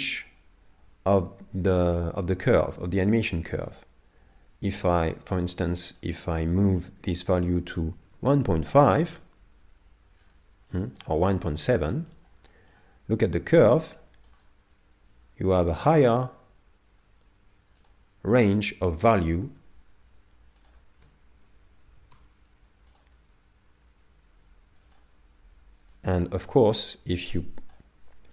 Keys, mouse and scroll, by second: 10.2-10.7 scroll down 6, 10.7 middle click, 11.4 middle click, 12.1-12.6 scroll down 2, 12.5 middle click, 13.7 middle click, 17.8 click, 24.9 click.